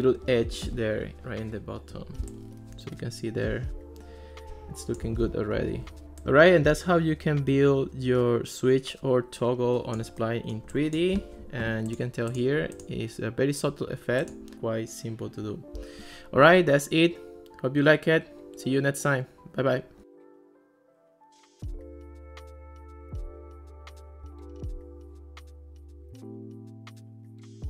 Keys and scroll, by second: 5.6 alt+r.